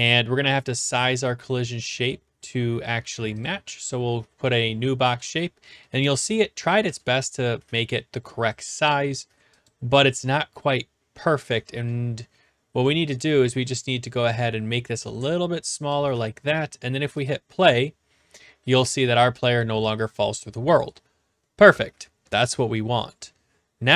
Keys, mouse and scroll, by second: 0.9 click, 3.4 click, 4.5 click, 5.2-6.9 typing, 6.4 right click, 7.0 right click, 9.6 click, 9.7 click, 13.1 right click, 15.9 click, 16.5 right click, 17.2 click.